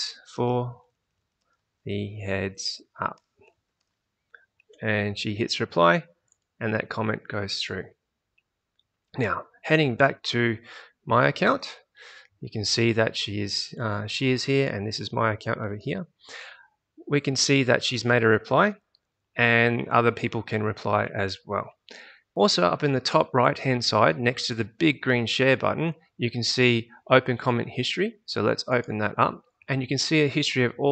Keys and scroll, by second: 0.0-4.1 typing, 11.0 typing, 11.3 alt+Tab.